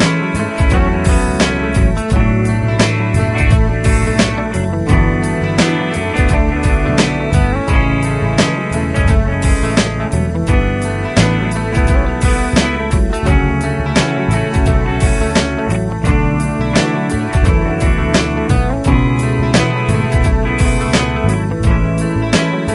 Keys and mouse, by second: 11.0 right click.